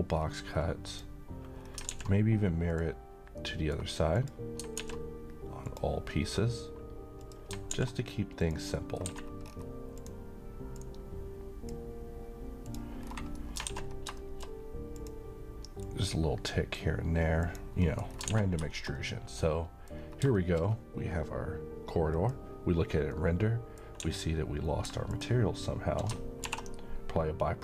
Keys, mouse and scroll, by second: 0.2-0.6 scroll down 1, 0.9 click, 1.6 scroll down 1, 2.0 alt+x, 2.7 click, 3.4-4.0 middle click, 4.2 click, 4.8 x, 5.6 click, 6.1 middle click, 6.4-7.2 scroll down 1, 7.2 click, 7.7 alt+x, 8.3 click, 8.7 middle click, 8.8 middle click, 9.1-9.5 scroll up 1, 9.9-11.7 drag, 13.0-13.3 scroll down 1, 13.3 middle click, 13.6 a, 13.9 scroll down 1, 14.2 shift+middle click, 14.9-16.7 drag, 17.8 scroll down 1, 17.8 middle click, 18.2 alt+a, 18.6 scroll down 1, 18.7-19.9 middle click, 19.9-20.2 scroll up 1, 20.3 shift+middle click, 20.6 shift+scroll down 1, 22.1 click, 23.2-24.1 middle click, 24.0 a, 25.1 click, 26.4 m.